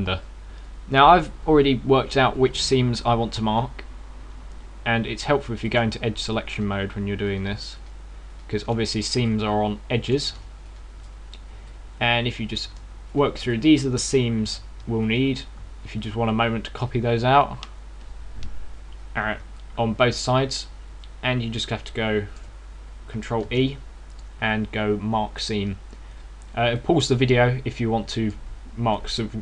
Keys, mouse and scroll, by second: 0.3 right click, 3.1 shift+right click, 3.8 shift+right click, 4.2 shift+right click, 6.5 click, 7.3 shift+right click, 8.1 shift+right click, 8.6 shift+right click, 9.2 shift+right click, 10.1 middle click, 11.5 shift+right click, 12.5 middle click, 13.9 shift+right click, 14.3 middle click, 15.9 shift+right click, 20.3 middle click, 24.2 ctrl+e, 27.5 middle click.